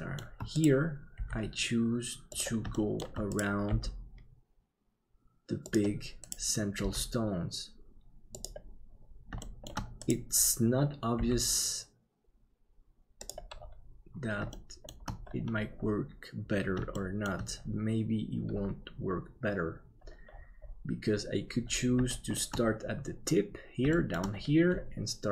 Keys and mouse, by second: 0.0 shift+middle click, 1.1 g, 2.7 shift+middle click, 3.7 g, 6.8 g, 9.4 middle click, 11.2 g, 14.6 shift+middle click, 17.0 shift+middle click, 22.2 shift+middle click, 23.9 shift+middle click.